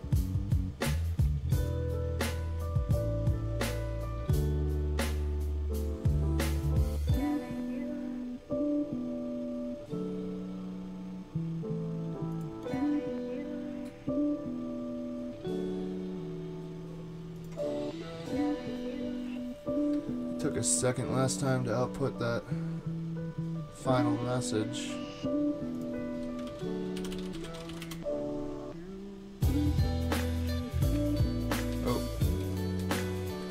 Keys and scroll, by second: 26.5 super+t, 26.7-28.2 typing, 30.9 super+`, 31.7 super+`, 32.4 super+`.